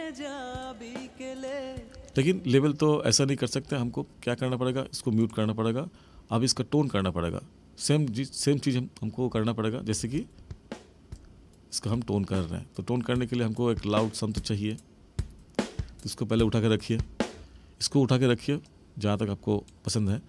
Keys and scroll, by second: 1.9 space, 9.9 space, 17.3 space.